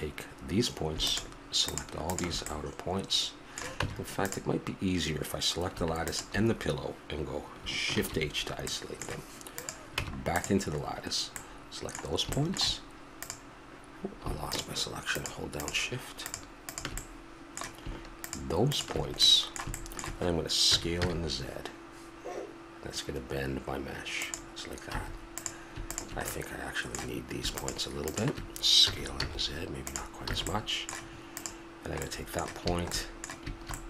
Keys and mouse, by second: 2.4-3.4 middle drag, 3.8 Tab, 7.9 shift+h, 8.7-9.5 middle drag, 9.9 Tab, 13.2-18.9 right drag, 20.7 s, 24.9 a, 25.3-26.3 right drag, 26.3-28.8 drag, 28.8 s, 30.3 a, 31.3 right click.